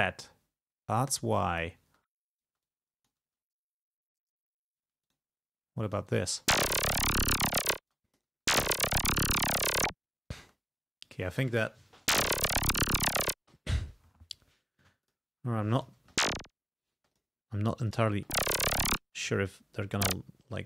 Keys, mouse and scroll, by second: 1.9 space, 2.7 click, 3.3 space, 4.9 space, 5.1 click, 5.9 click, 6.3 space, 8.0 click, 8.0 space, 8.7 click, 10.4 space, 10.7-11.0 scroll down 1, 11.9 space, 13.4 space, 13.6-14.0 scroll up 1, 15.1 click, 15.8 click, 16.0 space, 17.0 space, 17.1 click, 17.9 click, 18.2 space, 19.0 click, 19.1 space, 19.3 scroll down 1, 19.8 e, 20.1 click.